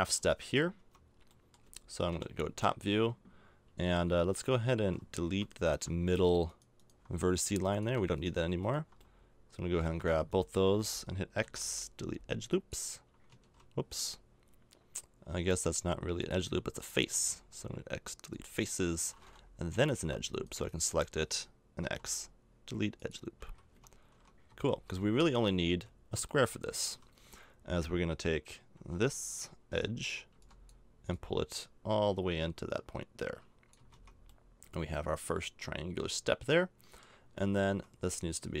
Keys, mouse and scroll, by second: 0.8 Tab, 2.1 KP_7, 3.2 middle click, 6.1-7.7 right drag, 7.7-9.7 middle drag, 11.4 x, 13.4 ctrl+z, 14.4-16.2 middle drag, 16.2-18.2 drag, 17.1 x, 18.2 right click, 19.8 click, 21.5-22.8 right drag, 21.8 x, 23.4 a, 23.7 Tab, 24.1 Tab, 24.5 KP_7, 24.8 z, 25.4-26.4 middle drag, 25.7 z, 28.8 b, 30.3 b, 33.8 a, 33.9 Tab, 37.7 Tab.